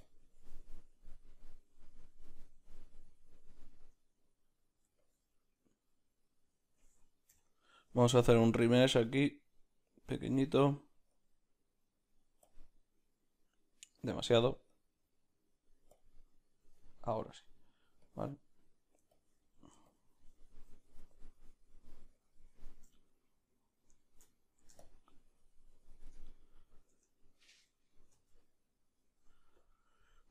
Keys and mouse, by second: 14.1 ctrl+z, 14.8-27.0 drag, 23.0 middle click, 24.3 ctrl+middle click, 26.3 ctrl+middle click, 27.0 Tab, 28.3 z.